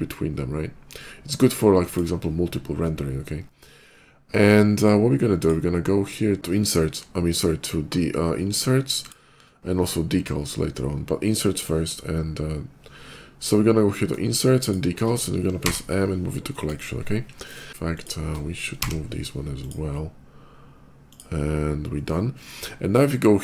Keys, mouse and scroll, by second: 1.5 click, 4.5 click, 8.9 shift+click, 13.2 click, 14.5 shift+click, 15.4 m, 16.4 click, 17.8 shift+click, 19.3 click, 19.3 m, 20.8 click.